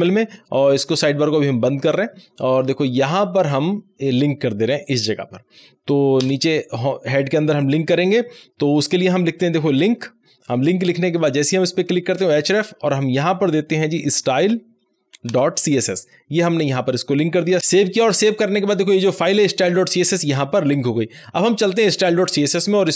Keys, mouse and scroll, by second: 1.8 click, 1.9 click, 2.6 scroll up 1, 4.8 click, 6.2 Return, 9.4-10.1 typing, 11.1 Tab, 13.3-14.7 typing, 15.3 Return, 17.6 click, 22.3 click.